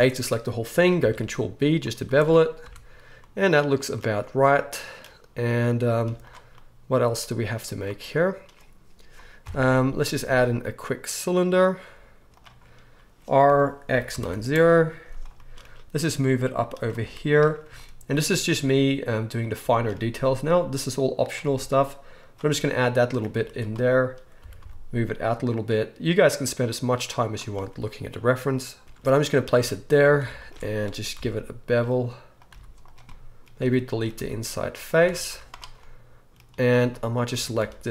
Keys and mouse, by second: 1.0 ctrl+b, 1.9 z, 2.6 Tab, 3.3 click, 3.4 right click, 3.5 click, 3.8-6.0 right drag, 6.0 click, 6.0 z, 6.7-17.7 right drag, 7.2 z, 9.4 KP_1, 10.3 shift+a, 13.4 r, 15.9 g, 17.0 z, 17.7-19.8 shift+middle drag, 18.4 s, 19.8-22.8 right drag, 21.4 g, 22.8 click, 22.9 right click, 23.0 click, 23.1 right click, 23.2-32.9 drag, 23.3 z, 24.4 g, 29.5 Tab, 30.0 alt+a, 31.1 ctrl+b, 32.5 z, 32.9 right click, 33.1-36.3 drag, 33.3 right click, 33.6-36.7 middle drag, 33.6-36.3 right drag, 34.1 x, 35.1 Tab, 35.3 z, 36.7-37.9 right drag, 37.4 Tab, 37.6 z.